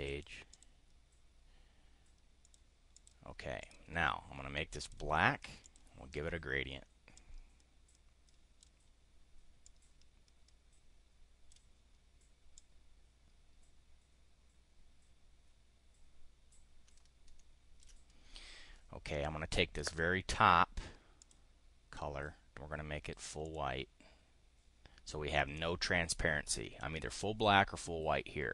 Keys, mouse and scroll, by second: 0.0 click, 0.4 click, 2.4 click, 2.8 click, 3.5 click, 4.8 click, 5.6 click, 7.1-8.6 drag, 9.6-11.6 drag, 12.5-17.9 drag, 21.1 click, 23.4 click.